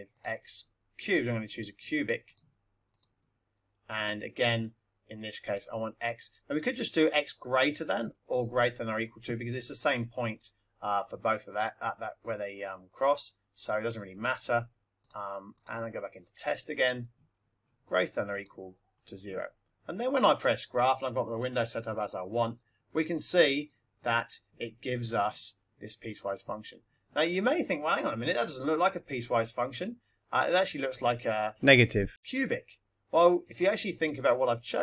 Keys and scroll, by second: 0.1 x, 2.2 ^, 3.0 3, 3.9 Right, 5.3 Right, 11.8 0, 14.9 x, 18.3 4, 18.9 0.